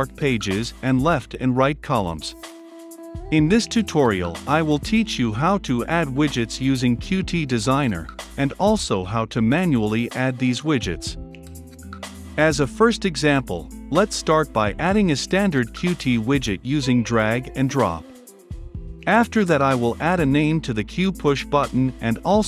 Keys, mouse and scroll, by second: 20.1-21.0 typing, 21.3 Return, 22.2-22.4 drag.